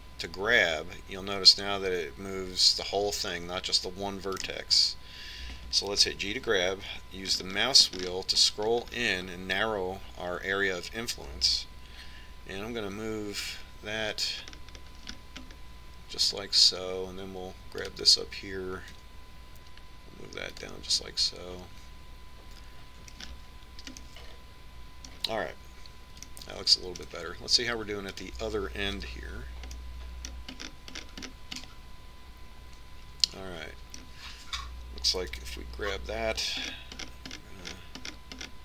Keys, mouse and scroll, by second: 0.5 g, 7.4 g, 19.1-20.2 right drag, 20.2 g, 22.2-24.3 middle drag, 24.5-27.2 middle drag, 27.6-29.5 middle drag, 29.5-31.0 right drag, 30.3 KP_Decimal, 31.0 middle click, 32.8-34.8 middle drag, 36.7 g.